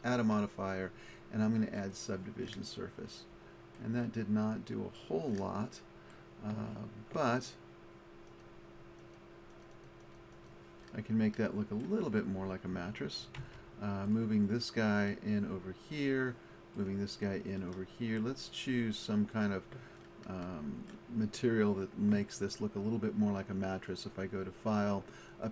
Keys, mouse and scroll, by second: 0.2 click, 13.5 Tab, 14.1-19.0 right drag, 19.9-23.9 middle drag.